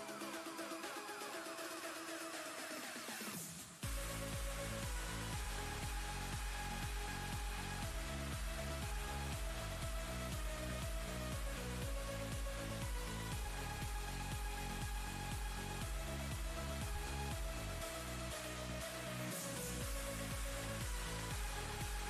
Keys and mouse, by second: 4.5 ctrl+space, 4.7 ctrl+click, 5.4 click, 5.9 ctrl+space, 6.1 ctrl+click, 6.5 ctrl+space, 7.4 v, 9.2-9.8 alt+shift+click, 12.9 ctrl+space, 12.9-13.6 ctrl+click, 13.4 ctrl+space, 15.5-17.6 drag, 18.4 ctrl+space, 18.6-19.8 ctrl+click, 18.9 ctrl+space, 19.3 ctrl+space, 19.9 space, 20.0-20.6 click, 20.4 space, 21.4-22.0 drag.